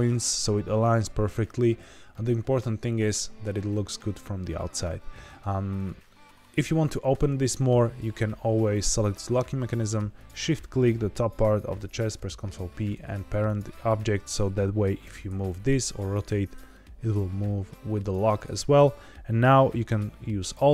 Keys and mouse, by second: 2.0-2.5 middle drag, 2.7-3.4 shift+middle drag, 10.2 shift+click, 11.9 ctrl+p, 13.9 click, 15.0 r, 15.2 x, 17.9 click, 19.6-19.9 middle drag, 20.5 alt+d.